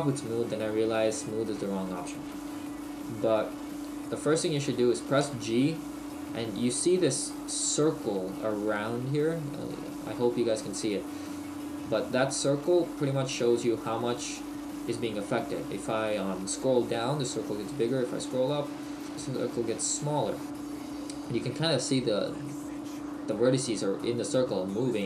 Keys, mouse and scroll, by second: 1.0 middle click, 4.1 right click, 5.2 g.